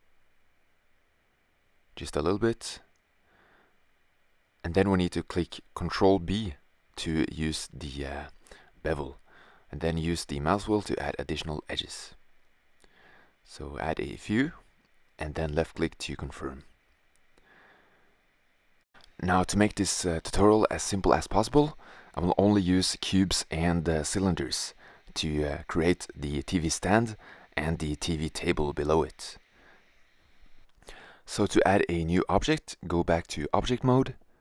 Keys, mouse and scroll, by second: 0.5 e, 6.1 ctrl+b, 17.0 middle click, 21.9 middle click, 34.0 typing.